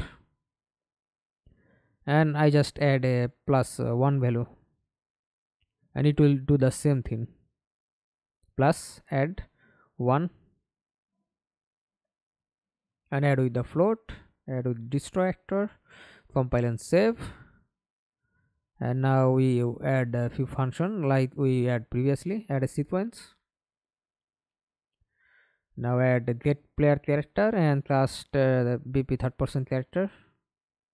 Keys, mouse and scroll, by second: 0.1 Down, 0.5 Return, 7.6 Return, 9.6 1, 9.8 Return, 15.1 double click, 19.6 s, 20.1 s, 20.2 s, 20.4 double click, 25.1 right click, 25.4 right click, 28.6 right click, 29.0-30.9 typing.